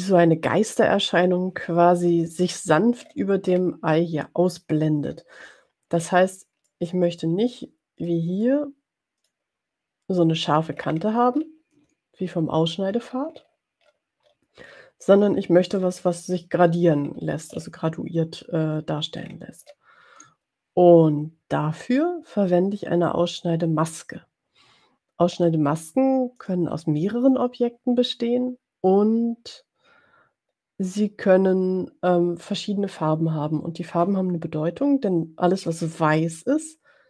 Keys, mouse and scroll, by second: 3.2 scroll up 2, 3.9 scroll up 2, 5.2 scroll down 2, 5.9 scroll down 2, 6.1-6.5 scroll up 2, 7.0 click, 8.1-9.5 drag, 11.1-12.2 ctrl+scroll up 2, 13.2-13.8 ctrl+scroll down 2, 14.3-14.7 ctrl+scroll down 2, 15.2 ctrl+scroll down 2, 15.8 click, 16.9-17.3 ctrl+scroll up 2, 17.4-18.0 ctrl+scroll up 4, 19.5-20.4 ctrl+scroll up 4, 23.4 click, 26.7 click.